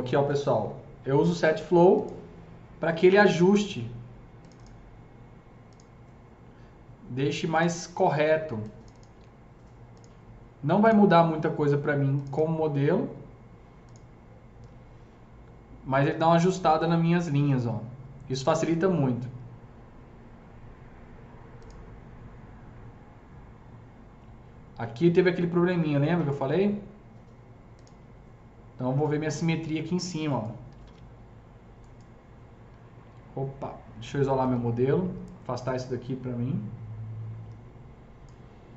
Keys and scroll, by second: 30.5-31.3 typing.